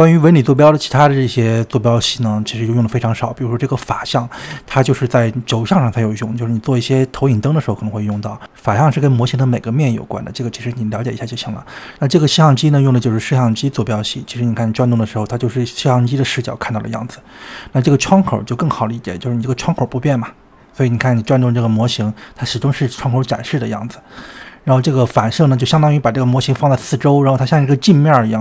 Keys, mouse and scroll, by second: 0.0-1.9 middle drag, 1.9 click, 2.9 click, 4.4 click, 6.1-11.7 middle drag, 11.7 click, 13.0-16.0 middle drag, 17.5 click, 20.0-23.0 middle drag, 23.6 click, 26.0-28.4 middle drag.